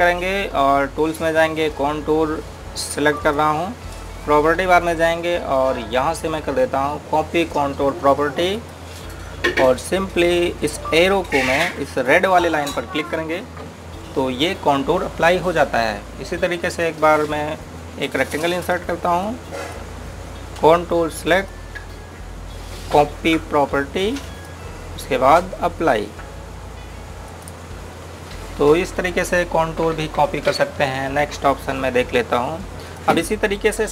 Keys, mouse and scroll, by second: 4.0 click, 9.3 click, 13.9 click, 19.7 click, 25.0 click, 28.3 click, 33.7 click.